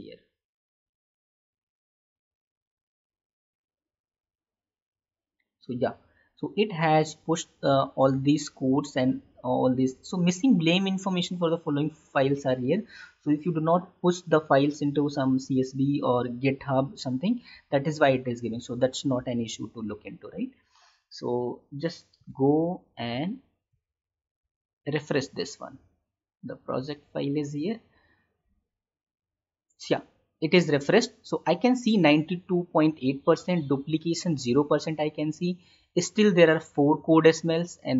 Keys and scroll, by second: 22.4 alt+Tab.